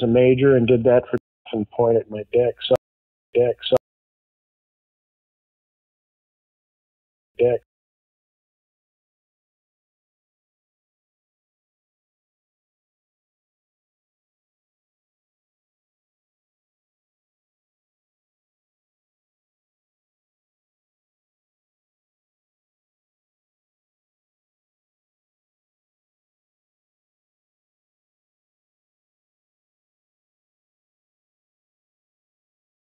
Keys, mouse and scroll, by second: 1.1 space, 1.3 click, 1.3 space, 2.7 space, 3.0 click, 3.2 space, 3.7 space, 4.0 click, 5.7-7.2 drag, 7.2 space, 8.6 Delete, 10.1 click, 10.4 right click, 11.0 click, 12.5 scroll down 3, 13.2 click, 13.9-16.0 scroll down 6, 17.1 click, 17.2 click, 17.9-18.8 scroll down 3, 20.0-20.6 scroll down 2, 21.0-21.6 scroll down 4, 22.0 scroll down 2, 22.3-22.9 scroll up 4, 23.0-23.5 scroll down 4, 24.1 scroll down 2, 24.6 scroll down 2, 26.0 click, 26.1 click, 27.5-28.0 scroll down 4, 28.5-29.0 scroll down 4, 29.9 scroll down 2, 31.2 click, 31.3 click, 32.7-32.9 drag.